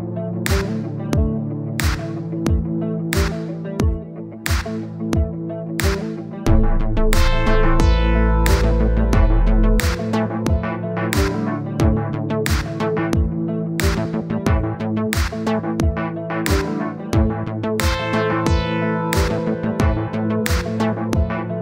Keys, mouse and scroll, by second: 1.6-2.7 drag, 3.2-4.4 drag, 4.7 click, 5.7-11.9 drag, 11.9-12.9 middle drag, 12.9 click, 14.7-15.9 middle drag, 16.2-17.4 middle drag, 17.9-20.2 middle drag.